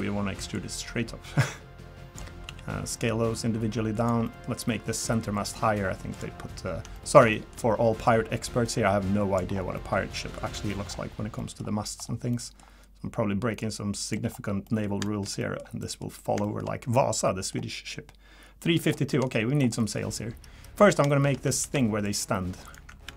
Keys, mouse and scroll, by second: 0.5 click, 2.4 s, 4.2 middle click, 4.4-4.8 scroll up 3, 5.3 click, 6.1 click, 6.4-6.7 scroll down 2, 6.9 middle click, 7.2 scroll down 1, 7.3 shift+middle click, 8.0 click, 9.5 scroll down 3, 9.7 middle click, 10.5 middle click, 10.8 scroll up 5, 11.4 middle click, 11.6-12.3 scroll down 3, 12.3 middle click, 12.6-13.6 scroll up 1, 13.6 click, 14.3 scroll down 1, 14.6 middle click, 15.0 shift+middle click, 15.4 middle click, 15.8 middle click, 16.4 shift+middle click, 17.2 middle click, 18.7 middle click, 19.1 shift+middle click, 19.4-19.8 scroll up 3, 19.8 middle click, 21.1 shift+middle click, 21.6 ctrl+r, 23.0 ctrl+r.